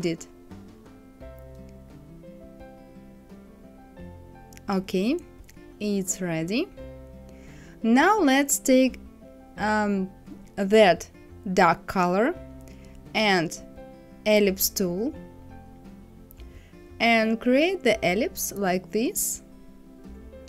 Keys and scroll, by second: 1.2 ctrl+d, 1.8 ctrl+d, 2.3 ctrl+d.